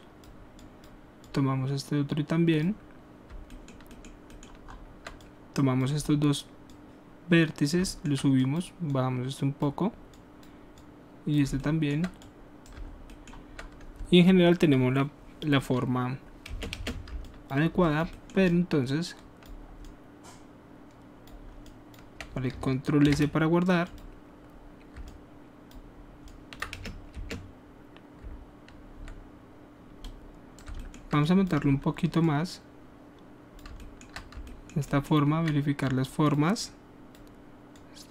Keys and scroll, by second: 16.5 space, 16.7 space, 23.0 s, 26.7 alt+space.